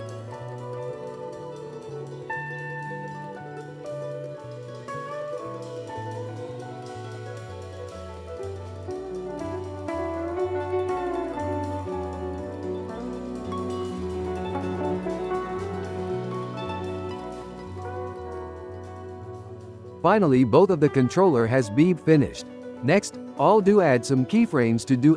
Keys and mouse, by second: 0.5 ctrl+p, 0.9-1.3 ctrl+middle drag, 1.3 drag, 1.6 drag, 1.9-2.6 ctrl+middle drag, 2.6 g, 4.1 shift+middle click, 5.1-6.2 drag, 6.2-7.6 shift+middle drag, 7.6 click, 8.2-10.3 ctrl+middle drag, 8.9-9.3 drag, 10.2 click, 10.7 g, 13.8 click, 14.3 click, 14.8 click, 16.0 click, 17.3 click, 17.8 g, 19.6 g, 21.3 click, 21.8 g.